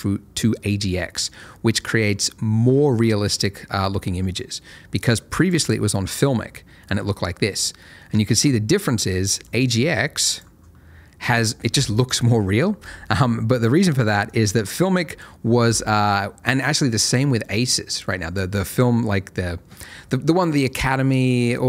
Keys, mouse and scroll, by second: 7.8-9.3 scroll up 1, 9.3 click, 9.6 double click, 13.4-14.2 scroll down 1, 14.2 click.